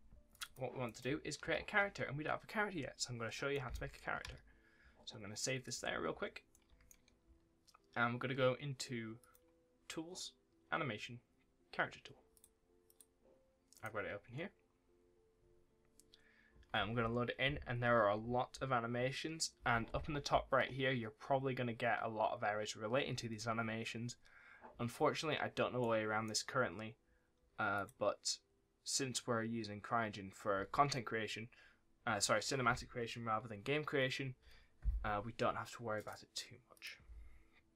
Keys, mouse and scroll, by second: 0.2 click, 0.3 double click, 0.7-1.5 typing, 0.7 right click, 3.4 right click, 4.1 ctrl+s, 5.7-6.0 scroll down 1, 6.0-6.4 scroll up 1, 6.4 right click, 6.5 a, 9.1 click, 12.2 click, 13.6 right click, 25.7 right click, 27.6 click, 35.8 click.